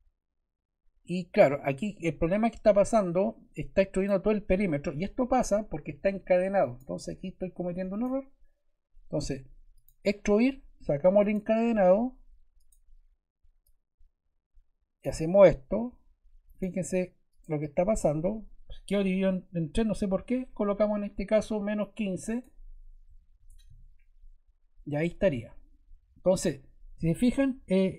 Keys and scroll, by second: 22.8-24.1 typing.